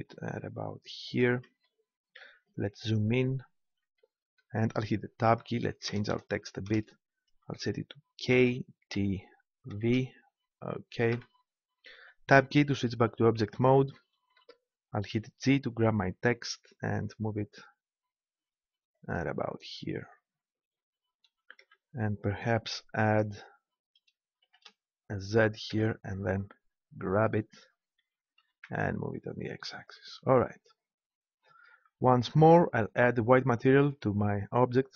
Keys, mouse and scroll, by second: 1.6-4.0 drag, 5.2 Tab, 5.9 BackSpace, 8.2 shift+k, 9.0 shift+t, 9.7 shift+v, 11.2 Tab, 15.1 g, 15.7-18.0 middle drag, 19.7-20.9 drag, 21.0 click, 21.6 Tab, 24.4 shift+z, 25.7 Tab, 28.0 g, 29.9-31.8 drag, 33.3-34.9 drag.